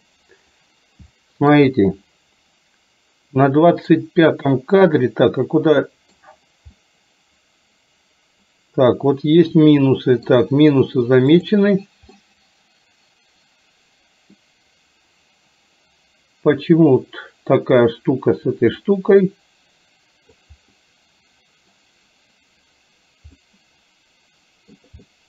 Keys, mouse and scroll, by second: 1.2-1.7 shift+middle drag, 4.4-6.2 middle drag, 6.8-10.4 middle drag, 11.4 click, 12.3-14.4 middle drag, 19.1-20.6 drag, 20.8-21.8 middle drag, 21.8 scroll down 1, 23.4 scroll up 1, 23.6-24.8 middle drag, 25.2 scroll up 1.